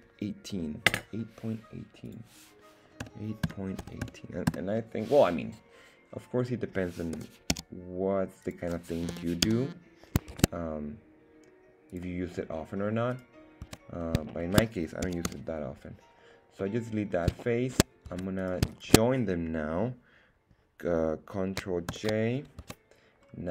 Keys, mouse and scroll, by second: 2.0-5.0 drag, 7.1 g, 7.5 z, 8.4 click, 9.1 g, 9.4 z, 10.3 shift+Tab, 11.9 click, 12.3 scroll up 1, 13.1 right click, 13.6 Tab, 14.3 shift+middle click, 15.0 x, 16.6 middle click, 17.4 shift+middle click, 18.0 Tab, 18.4 right click, 21.9 ctrl+j, 22.6 Tab, 23.2-23.5 scroll up 2.